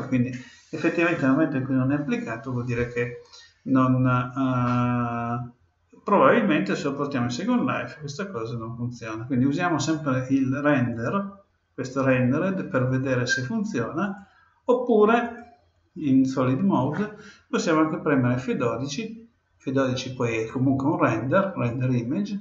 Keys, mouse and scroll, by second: 10.9-12.8 drag, 14.0-15.7 drag, 20.4-22.0 drag.